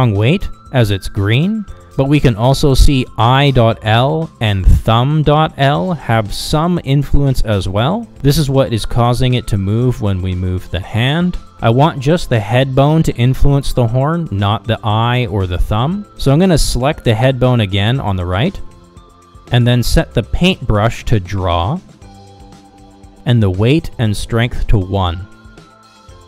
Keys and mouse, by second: 1.8-2.9 middle drag, 3.4 Down, 5.1 middle click, 8.0 Down, 8.8 Down, 9.7 Down, 10.0 Down, 10.3 Down, 10.6 Down, 10.9 Down, 14.6 Down, 15.0 Down, 15.4 Down, 15.7 Down, 16.0 Down, 16.3 Down, 16.6 Down, 16.8 Down, 17.1 Down, 17.8 Down, 18.3 Down.